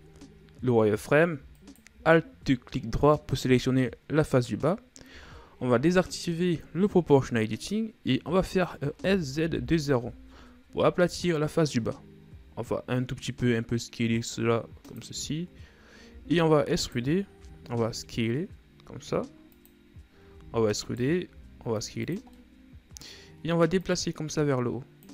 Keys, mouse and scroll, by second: 0.2 Tab, 2.1 alt+right click, 6.2 o, 9.5 s, 12.9 s, 15.8-16.6 shift+scroll down 1, 16.6 e, 17.9 s, 20.8 e, 22.8 middle click, 23.7-24.3 scroll up 2, 24.3-25.1 drag.